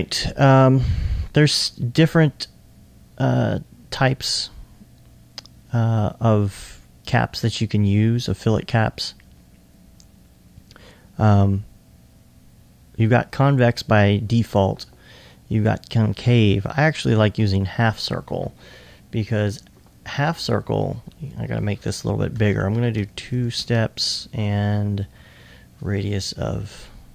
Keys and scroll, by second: 18.5 2, 19.3 2, 22.3 2, 22.7 Tab, 23.3 2, 25.3 2.